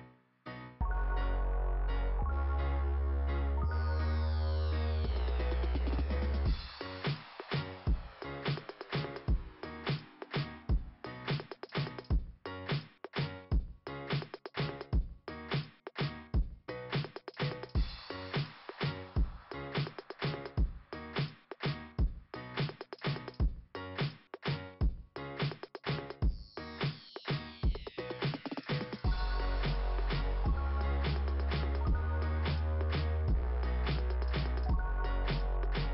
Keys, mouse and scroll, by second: 0.0 click, 3.4 click, 4.4 click, 6.2 scroll up 2, 8.4 scroll down 2, 10.0 scroll down 2, 12.1 click, 14.4 click, 15.6 click, 16.4 click, 18.2 scroll up 2, 20.3 scroll down 2, 23.1 scroll down 2, 25.0 click, 26.2 click, 27.8 click, 29.8 click, 31.2 click, 33.5 click, 35.4 click, 35.8 click.